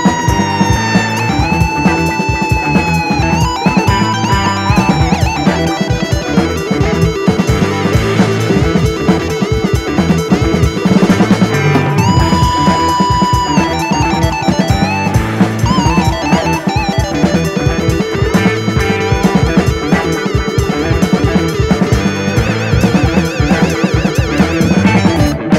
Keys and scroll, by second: 4.8 1, 4.9 1, 5.0 Return, 9.2 typing, 13.0 typing, 13.1 Return, 14.3 typing, 15.3 super+d.